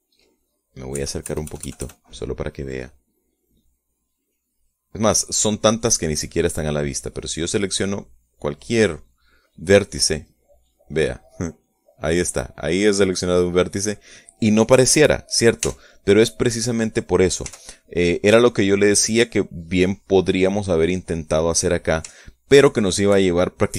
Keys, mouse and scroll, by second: 2.5 KP_Add, 5.4-7.3 drag, 7.3 middle click, 9.5 right click, 13.3 right click, 17.3 Tab, 19.1 x, 20.5 click, 20.8-22.4 middle drag, 22.4 click, 22.7 middle click, 23.7 shift+scroll down 1.